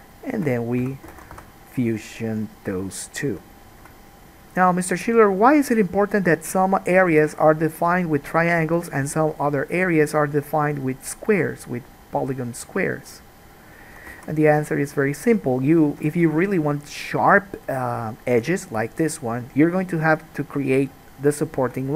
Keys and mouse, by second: 0.3 shift+middle click, 1.0 f, 1.4 alt+a, 1.6 1, 2.6-6.6 right drag, 6.5-8.8 drag, 6.5 middle click, 7.3 g, 8.8 middle click, 9.2-10.9 drag, 9.2 g, 10.9 middle click, 11.4-21.9 drag, 12.4 g, 14.4 alt+a.